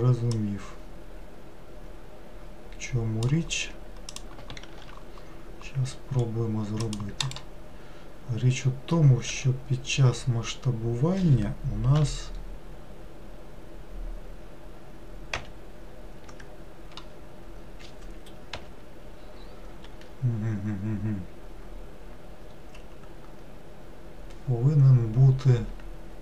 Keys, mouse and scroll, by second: 0.3 click, 4.1 click, 4.6 ctrl+r, 9.3 s, 18.5 ,.